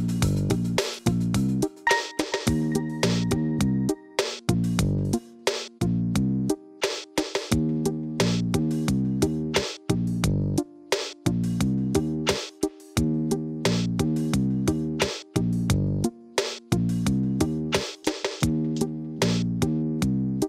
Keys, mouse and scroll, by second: 0.8 scroll down 1, 1.7 shift+d, 3.2 shift+d, 4.4 r, 5.4 scroll down 1, 5.9-7.0 shift+middle drag, 7.0 shift+click, 7.5 click, 8.0 shift+click, 8.6 shift+d, 10.6 r, 12.2 g, 14.6 click, 15.1 shift+d, 17.2 r, 18.1 g, 20.2 r.